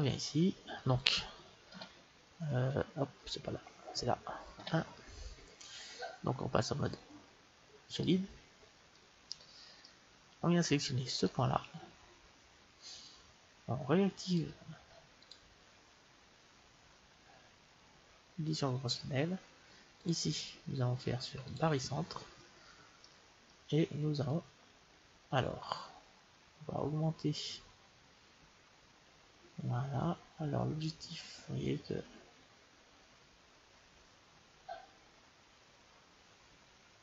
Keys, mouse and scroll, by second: 1.6 KP_1, 8.2 click, 8.8-10.7 middle drag, 11.1-13.0 right drag, 14.2-16.0 drag, 19.9-21.8 drag, 22.9-24.8 middle drag, 24.1-26.2 drag.